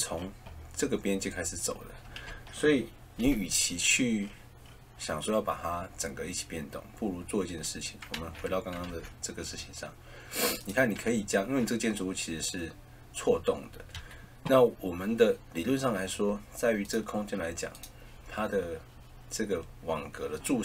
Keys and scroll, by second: 2.2 ctrl+z, 8.1 ctrl+z, 13.8 Escape.